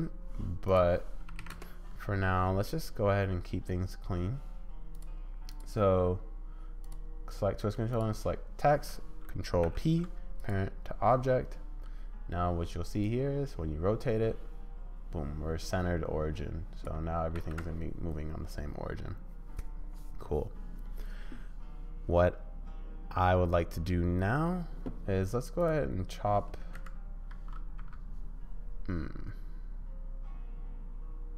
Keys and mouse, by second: 5.0 middle click, 6.9 click, 9.6 ctrl+p, 13.2-14.3 drag, 14.3 middle click, 14.4 click, 14.5 middle click, 14.7 click, 15.1 middle click, 15.7-16.9 drag, 17.2 ctrl+middle click, 17.3 ctrl+z, 17.5-19.7 middle drag, 25.8-31.3 drag.